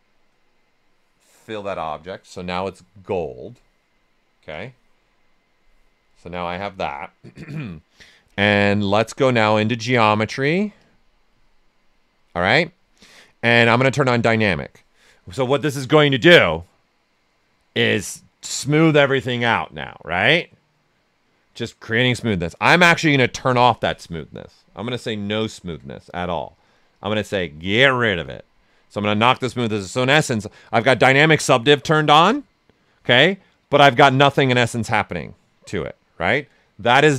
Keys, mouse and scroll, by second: 4.5-6.0 drag, 6.0-8.6 right drag, 8.6-14.0 drag, 8.6 typing, 25.5 shift+m, 26.5-32.4 drag, 35.2-36.9 right drag, 36.9 shift+m.